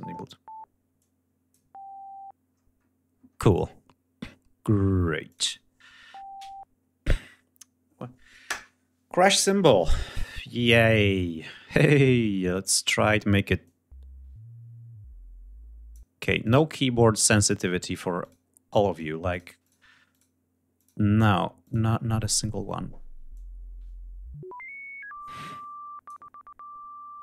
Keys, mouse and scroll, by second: 0.5 click, 2.1-2.5 scroll down 2, 2.7-3.0 scroll up 2, 4.8 click, 13.2-15.7 drag, 16.0 click, 16.8 click, 17.8 click, 18.5 click, 18.8 click, 19.2 click, 19.7 click, 20.3 click, 21.2 click, 22.9-25.8 drag, 27.0 click.